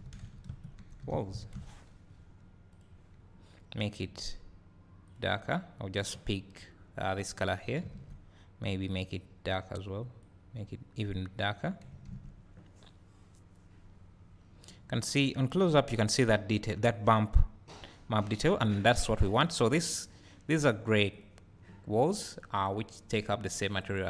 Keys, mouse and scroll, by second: 2.7 click, 8.2 a, 10.3 click, 12.9 scroll up 1, 17.0 scroll down 1, 19.7 click, 21.2 click.